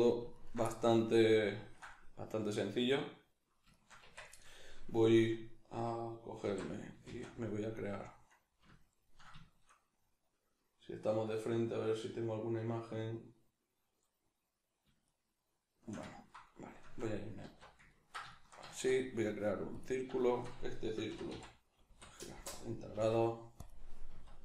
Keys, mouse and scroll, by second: 0.3 ctrl+right click, 0.6-23.7 middle drag, 4.0 Tab, 6.4 alt+q, 7.0 shift+a, 17.5 alt+q, 18.7 shift+a, 21.1 r, 22.9 s, 23.7 click, 24.1 s.